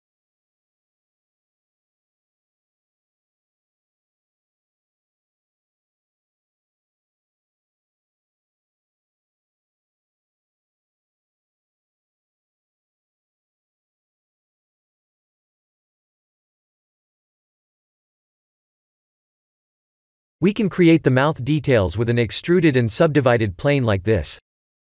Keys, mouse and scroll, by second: 0.1 Tab, 1.2 z, 2.2 shift+z, 3.0 shift+z, 3.7 Tab, 5.0 click, 6.4 shift+click, 7.5 click, 11.7 Tab, 12.4 shift+z, 13.3 shift+z, 15.8 middle click, 19.1 KP_1, 19.8 scroll down 3, 20.4 click, 20.4 scroll down 2, 21.1 shift+a.